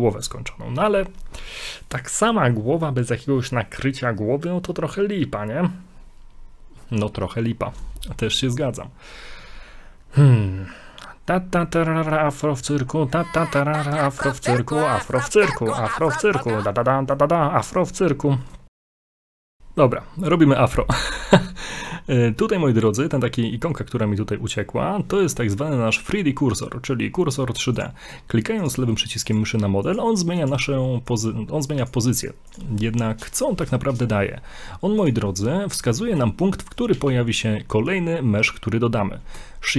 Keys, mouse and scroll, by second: 8.0 shift+middle click, 8.4 scroll up 2, 12.8-13.2 scroll down 1, 13.2 middle click, 14.3 scroll down 2, 14.6 middle click, 16.5 shift+middle click, 16.9 middle click, 17.6 middle click, 21.2 middle click, 27.8 click, 28.6 click, 29.3 click, 30.0 click, 31.8 click, 33.1 click, 35.0 click, 35.5 middle click, 35.9 middle click, 35.9-36.4 scroll up 2, 37.0 shift+a.